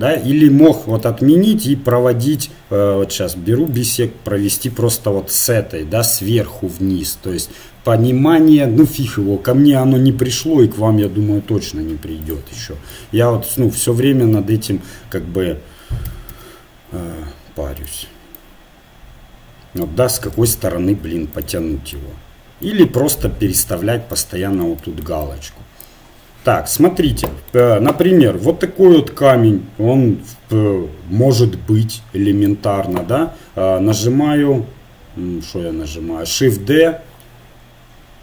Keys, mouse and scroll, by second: 0.9 ctrl+z, 1.9-7.1 drag, 10.5-14.0 drag, 14.6 ctrl+z, 16.1 a, 16.3 a, 18.0-19.8 drag, 20.3 ctrl+z, 21.3-22.6 drag, 27.6 Tab, 36.4 shift+d.